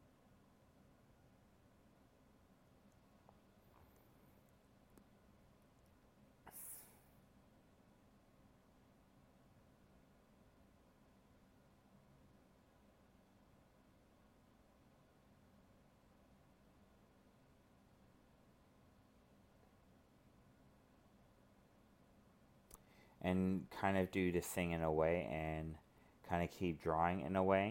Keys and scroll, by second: 2.4 ctrl+z, 5.2 alt+space, 7.6 ctrl+z, 9.4 alt+space, 13.3 alt+space, 17.4 alt+space, 21.0 alt+space, 25.5 alt+space.